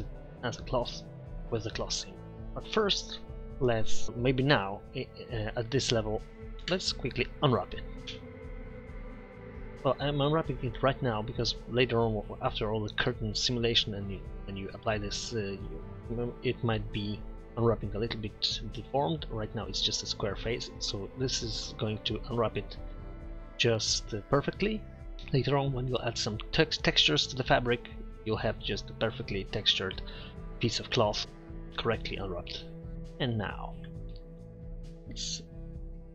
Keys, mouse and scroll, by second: 3.3 Tab, 5.1 middle drag, 5.9 middle click, 6.7 Tab, 8.1 u, 11.3 Tab, 33.9 Tab.